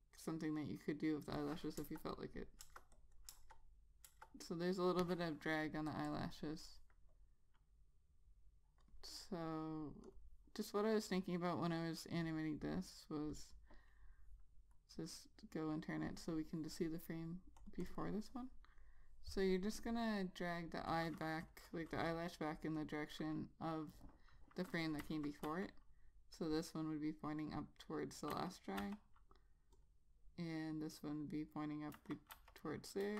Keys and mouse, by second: 2.0 click, 2.8 Return, 3.1 click, 3.5 Return, 4.3 Return, 4.5 click, 6.3 double click, 7.4 click, 18.1 double click, 23.0 double click, 25.2 click, 26.7 click, 28.5 ., 29.0 ., 30.0 click, 32.2 ,.